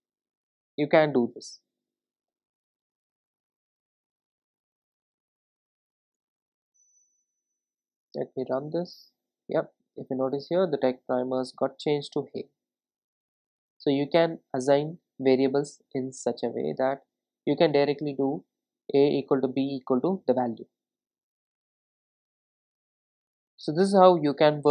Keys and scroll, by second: 3.4 Return, 8.2 ctrl+r.